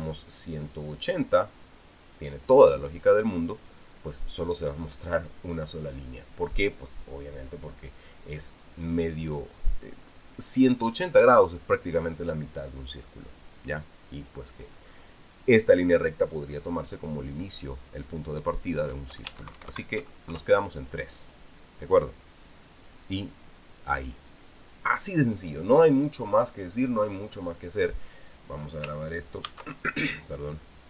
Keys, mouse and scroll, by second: 1.4 click, 18.8 click, 19.9 Home, 20.2 shift+Right, 21.1 shift+KP_3, 23.2 click, 25.0 click, 30.2 ctrl+s.